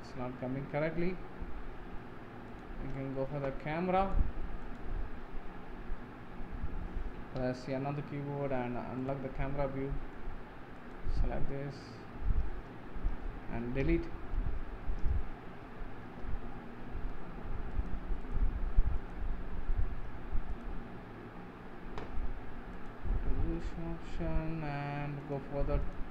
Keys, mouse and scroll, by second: 4.2 click, 4.8 click, 5.3 scroll down 5, 5.9 scroll up 1, 7.8 n, 9.0 click, 9.5-11.0 middle drag, 11.0 click, 11.7-13.9 scroll up 5, 13.9 Delete, 22.9 click.